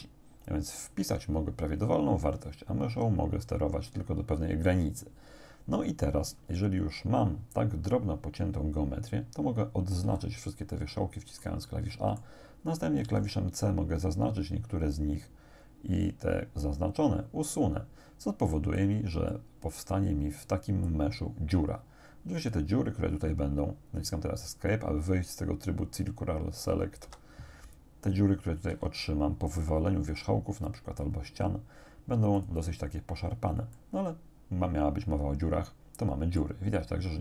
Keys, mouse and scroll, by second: 10.1 a, 10.7 click, 11.9 click, 13.1 c, 13.6-19.0 drag, 19.3-20.7 drag, 20.9-22.7 drag, 27.1 Escape, 28.7 x, 32.4 click, 33.8-36.6 drag, 36.9-37.2 scroll up 2.